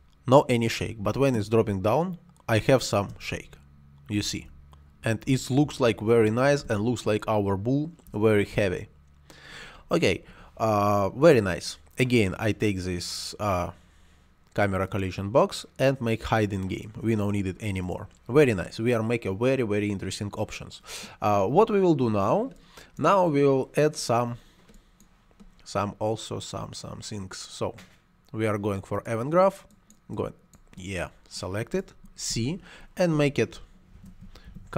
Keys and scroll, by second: 3.0 space, 10.1 Escape, 32.2 c, 33.6-34.7 typing.